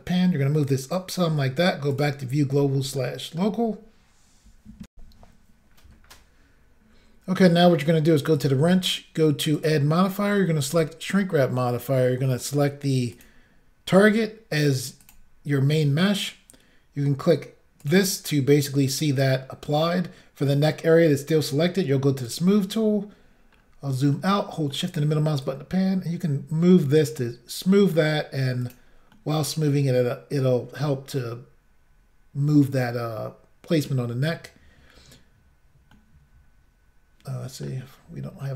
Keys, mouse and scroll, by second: 0.1 click, 2.0 click, 2.0 click, 3.0 shift+middle click, 4.9 Insert, 8.4 click, 9.6 click, 10.7 click, 13.2 click, 15.1 click, 17.9 click, 22.3 click, 22.4 click, 23.6-24.2 scroll down 1, 24.2 shift+middle click, 25.5 click, 27.8 middle click, 28.7 click, 28.8 click, 29.2 middle click, 36.0 middle click.